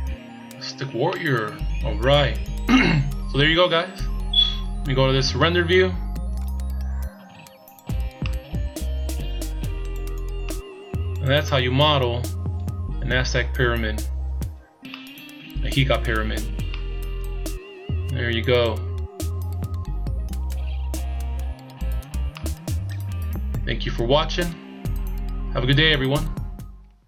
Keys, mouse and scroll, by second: 0.5-1.0 scroll up 2, 1.1 middle click, 3.8 scroll up 2, 5.3 click, 6.7 scroll down 2, 8.7 middle click, 10.7 middle click, 13.3 shift+scroll down 2, 14.0 shift+scroll up 2, 15.2 middle click, 17.3 middle click, 21.4 shift+scroll up 2, 22.6 middle click, 25.1-25.9 shift+scroll up 2.